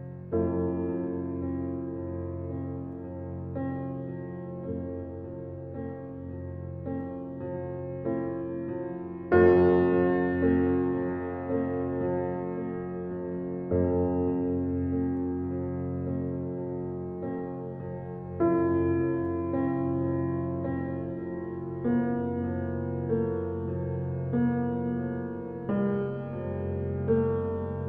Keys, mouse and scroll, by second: 0.4 Tab, 0.8 click, 2.1 g, 5.3-6.3 middle drag, 6.3 ctrl+z, 6.6 middle click, 7.5 g, 9.6 click, 10.5 click, 11.4 g, 13.8 click, 14.6 g, 15.8-17.0 middle drag, 17.5 Tab, 18.1-19.4 middle drag, 19.4-21.3 drag, 21.9-22.7 right drag, 22.7-23.9 middle drag, 23.9 click, 24.1 scroll down 1, 24.7 click, 26.1-27.1 alt+middle drag, 27.1 shift+d.